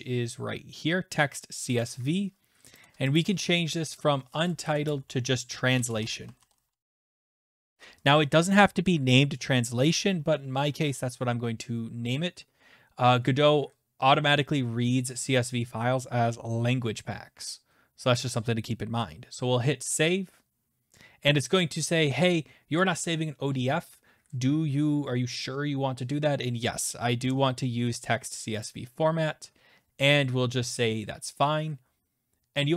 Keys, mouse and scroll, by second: 1.8 click, 2.7 click, 3.1 click, 3.9 click, 4.6-8.1 typing, 19.8 click, 20.0 click, 28.7 click, 30.7 click.